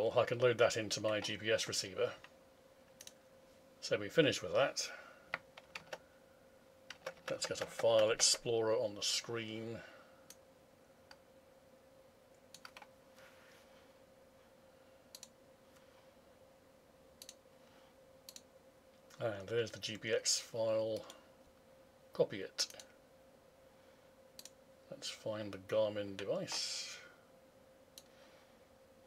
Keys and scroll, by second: 5.8 alt+Tab.